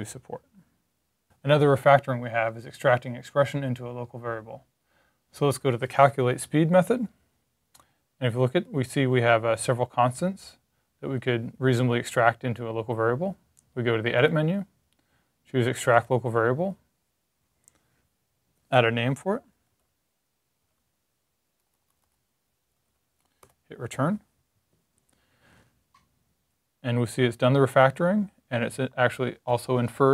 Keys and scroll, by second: 19.0-23.3 typing, 25.7 typing.